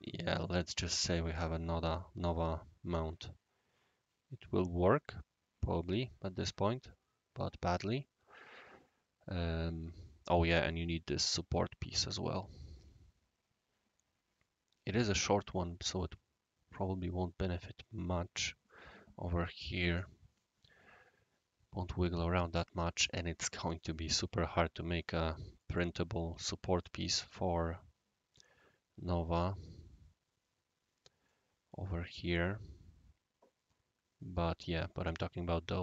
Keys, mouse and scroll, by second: 0.4-11.0 right drag, 11.0-14.4 scroll up 1, 15.5-18.2 right drag, 23.0-23.8 right drag, 25.6-26.8 right drag, 31.2-34.4 right drag.